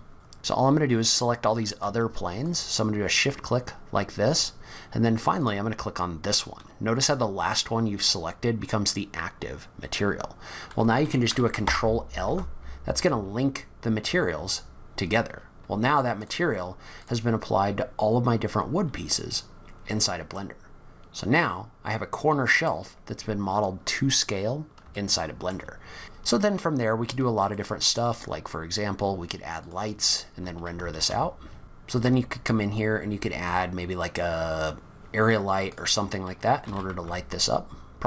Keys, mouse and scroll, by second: 0.1 shift+click, 2.4 shift+click, 5.4 shift+click, 11.6 ctrl+l, 14.2-15.2 scroll up 10, 15.3-16.2 scroll down 6, 16.2 click, 17.0 click, 18.6-19.4 scroll down 2, 19.4-20.0 scroll up 1, 20.0 scroll down 1, 20.3 middle click, 23.0-23.4 scroll up 2, 23.5 scroll down 2, 24.9 shift+middle click, 26.0 middle click, 26.8-27.2 scroll up 1, 27.5 shift+middle click, 29.7 click, 31.0 shift+a, 31.6 scroll up 4, 31.9 shift+a, 36.6 g.